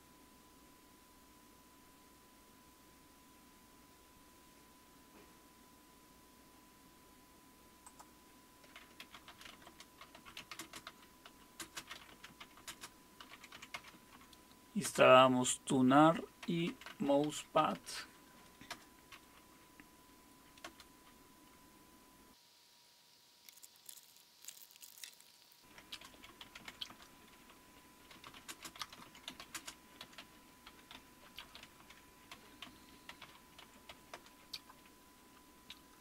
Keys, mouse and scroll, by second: 7.8-9.0 drag, 8.8-14.8 typing, 16.2-19.2 typing, 20.4-21.1 typing, 26.0-34.4 typing.